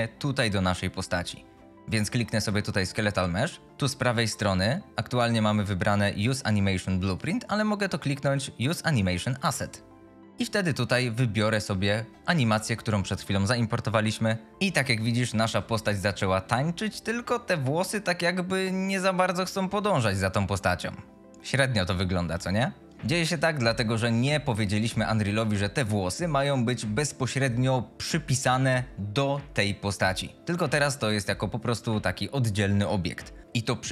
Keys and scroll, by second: 1.6 s, 4.5 F22, 14.5 F22, 15.5 s, 15.9 a.